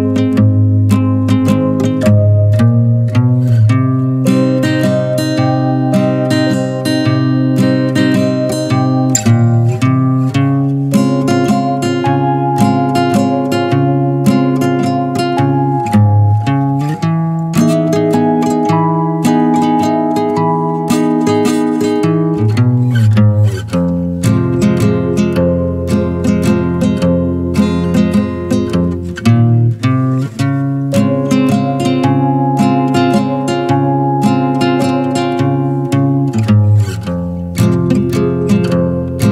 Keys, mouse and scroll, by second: 0.3 n, 0.5-2.0 middle drag, 2.0-4.9 drag, 5.9 click, 6.3-7.0 middle drag, 7.0 click, 7.3 a, 8.4-9.8 middle drag, 10.1 drag, 10.5-12.6 middle drag, 12.6 click, 12.8 shift+a, 15.0 scroll up 2, 15.3 alt+middle click, 16.1-16.6 shift+middle drag, 16.6 r, 18.3-18.9 middle drag, 18.9 scroll up 1, 19.1-19.5 middle drag, 19.5 s, 20.7 shift+middle drag, 21.0 scroll up 1, 21.1-22.6 right drag, 22.6 click, 23.1-23.9 drag, 24.0 drag, 24.4-25.1 middle drag, 25.1 click, 25.6 ctrl+a, 26.6-27.3 middle drag, 27.3 scroll up 1, 27.6-27.9 shift+middle drag, 27.9 click, 28.1 Tab, 28.4 middle click, 29.0 Tab, 29.2 click, 30.0 middle click, 30.6 scroll down 1, 30.8 middle click, 31.4 F4.